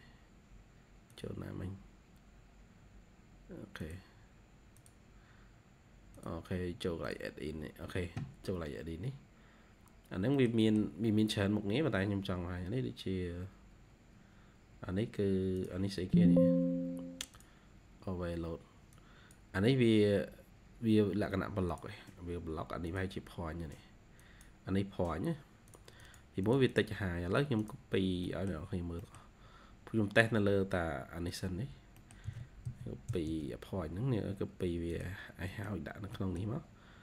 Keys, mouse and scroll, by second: 10.3 middle click, 10.5 middle click, 11.1-12.3 scroll down 2, 25.9 double click, 26.3 double click, 28.1 middle click, 28.9 middle click, 29.1-29.9 scroll down 1, 29.9-31.2 scroll up 2, 31.9 middle click, 32.2-33.9 typing, 33.1 scroll up 1, 35.1 scroll down 1, 35.3 scroll up 1, 35.4 middle click, 36.0 middle click.